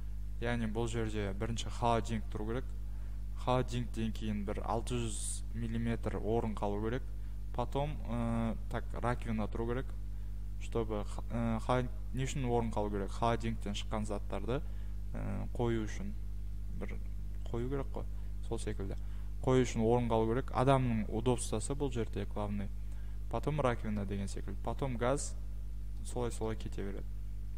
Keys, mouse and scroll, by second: 1.5-2.9 scroll, 26.0 scroll, 26.9-27.5 scroll.